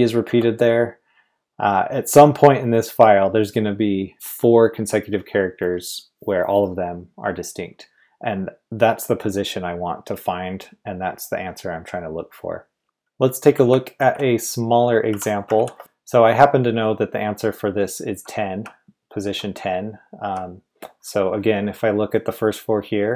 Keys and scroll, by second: 0.2 typing, 12.6-13.9 typing, 15.1 i, 15.5 super+v, 16.5-19.9 typing.